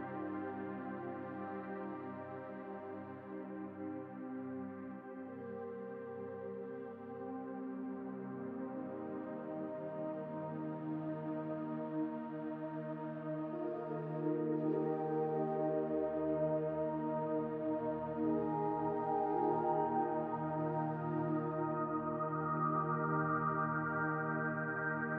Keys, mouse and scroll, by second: 3.7 Tab, 6.2 click, 11.1-14.1 drag, 22.1-24.1 drag, 24.1-25.1 right drag.